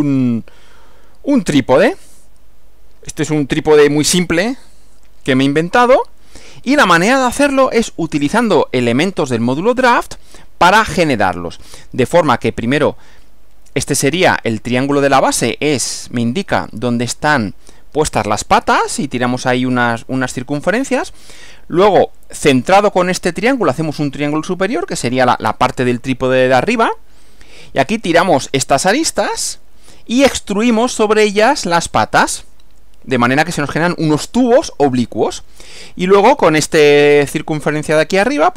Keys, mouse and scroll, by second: 6.7 click, 8.1 Right.